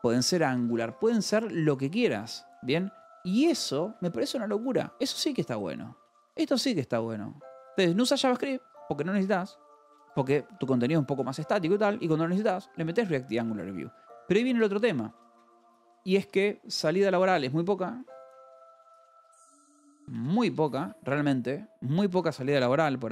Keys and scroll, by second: 0.0-3.6 typing, 5.9 o, 7.5 Escape, 7.7-10.7 typing, 9.1 Escape, 12.6 shift+v, 12.8 Escape, 13.4 o, 14.5 Return, 15.8-21.0 typing, 22.1 o.